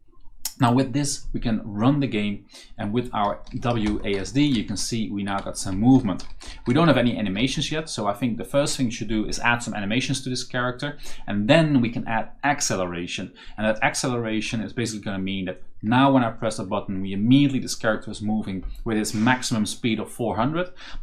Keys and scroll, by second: 2.7-7.9 typing, 14.3 s, 15.7 a.